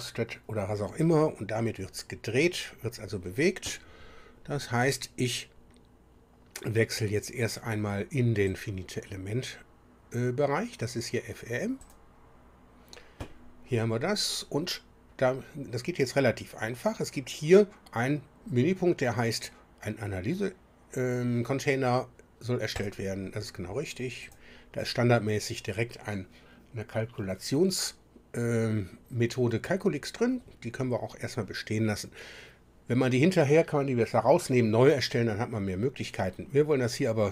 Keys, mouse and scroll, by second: 8.4 click, 11.8 click, 22.7 click, 24.2 click.